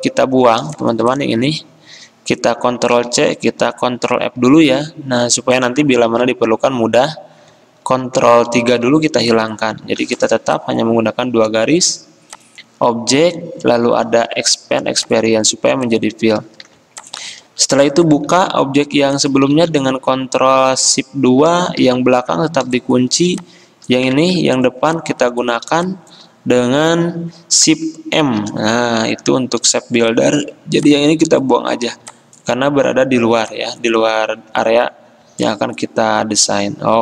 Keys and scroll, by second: 3.0 ctrl+c, 4.1 ctrl+f, 6.1 ctrl+z, 8.5 ctrl+3, 9.9 ctrl+z, 16.7 alt+2, 18.4 z, 19.6 z, 21.9 2, 24.3 ctrl+z, 28.4 m.